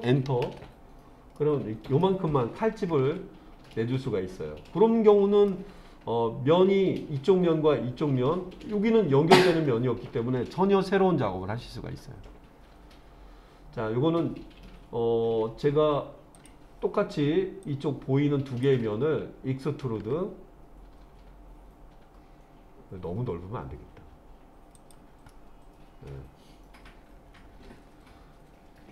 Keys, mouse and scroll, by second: 3.2 middle click, 3.7-5.5 middle drag, 16.3 click, 17.6-18.7 drag, 20.0 e, 24.8 click, 25.3-28.9 middle drag.